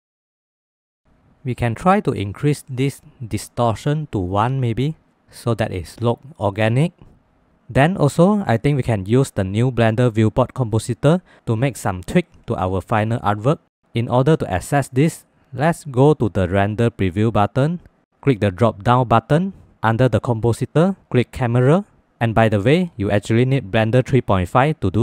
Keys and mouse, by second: 0.1 middle click, 0.5 middle click, 1.0 middle click, 1.6 middle click, 2.3 middle click, 3.7-5.0 drag, 7.2 ctrl+s, 18.0-22.2 drag.